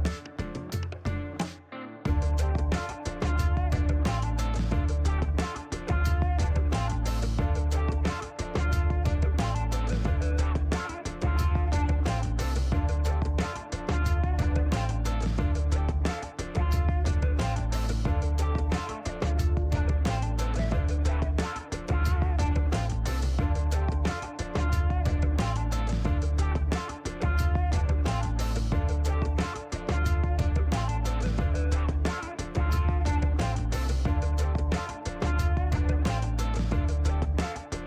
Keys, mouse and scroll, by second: 1.0 click, 2.6 click, 4.6 click, 5.9 click, 6.6 scroll up 2, 7.2-8.3 middle drag, 9.6 click, 11.1 click, 12.5 click, 16.4 click, 17.6 click, 18.2 right click, 18.5 scroll up 1, 18.9 middle click, 19.9 click, 23.2 click, 25.9 2, 26.2 Return, 29.7 click, 31.3 click, 32.8 click.